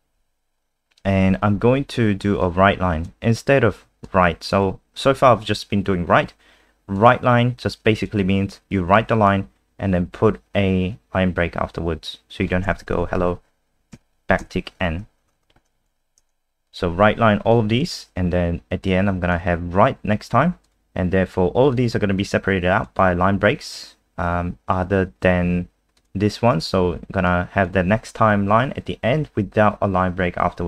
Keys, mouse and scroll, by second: 2.4 click, 13.0 Right, 14.4 n, 15.2 BackSpace, 15.3 BackSpace, 15.9 ctrl+s, 16.6 click.